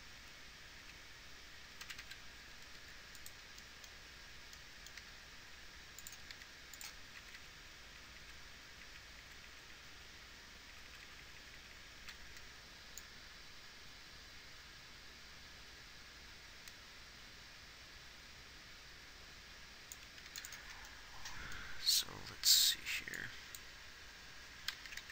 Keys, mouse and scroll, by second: 1.3 Left, 2.3 Right, 2.5 Right, 3.6 r, 5.4 g, 6.7 r, 7.6 Left, 7.9 Left, 8.4 Right, 8.6 Right, 9.2 Right, 20.6 ctrl+s.